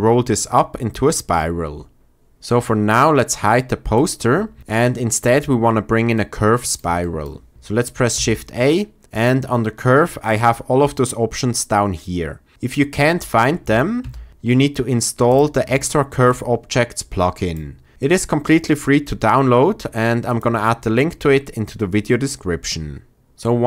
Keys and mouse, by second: 3.9 click, 6.9 shift+drag, 8.1 shift+a.